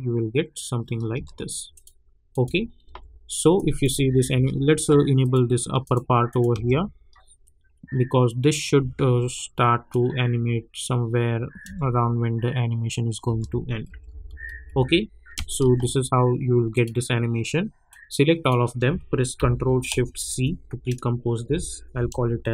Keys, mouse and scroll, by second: 0.0 space, 1.1 space, 1.7 click, 2.8 u, 3.5 click, 3.9 space, 5.2 click, 6.5 space, 8.8 space, 9.9-11.6 drag, 11.6 space, 14.1-15.3 typing, 16.7-20.2 drag, 20.2 ctrl+shift+c.